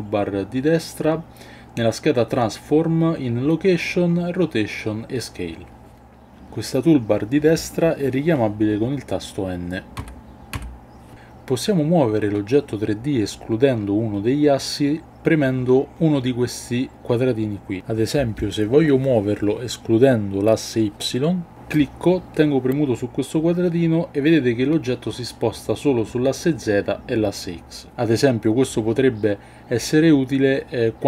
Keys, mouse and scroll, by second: 9.9 n, 10.5 n, 21.7-31.0 drag.